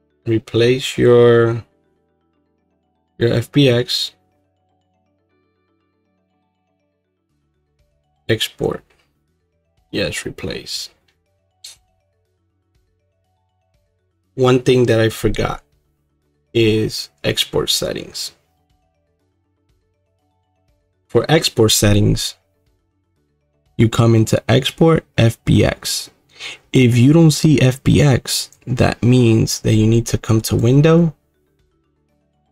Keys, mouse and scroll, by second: 6.6-32.5 drag.